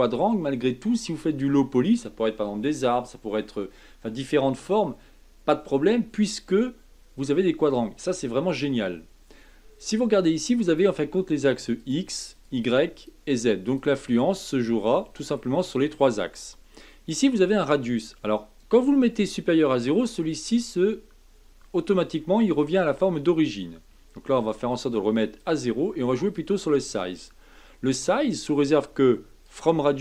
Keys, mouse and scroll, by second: 6.4-9.3 middle drag, 10.7 click, 11.7 click, 12.3 click, 12.9 click, 13.6 click, 14.0 click, 14.7-17.3 middle drag, 17.3-20.3 drag, 20.3-23.3 middle drag, 24.4-29.5 drag.